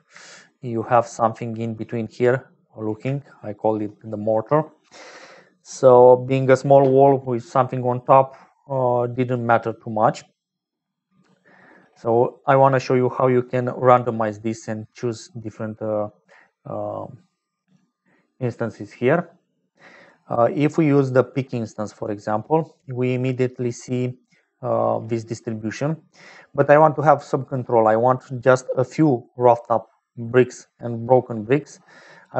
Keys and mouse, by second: 0.4 shift+click, 3.3 shift+click, 5.6-6.7 drag, 8.9 click, 10.0 middle click, 15.5 click, 21.9 click.